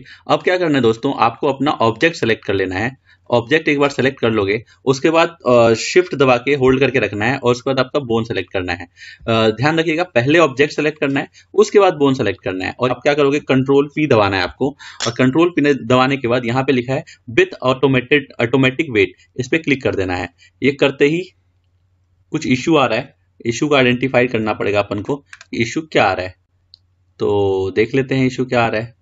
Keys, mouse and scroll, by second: 1.5 click, 2.2 click, 3.4 drag, 4.0 click, 8.3 shift+click, 14.6 ctrl+p, 25.7-28.5 middle drag.